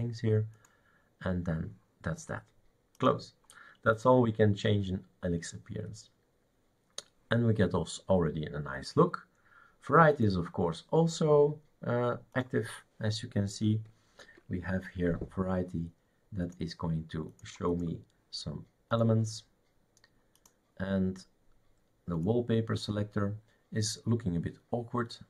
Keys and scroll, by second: 14.2 super+(.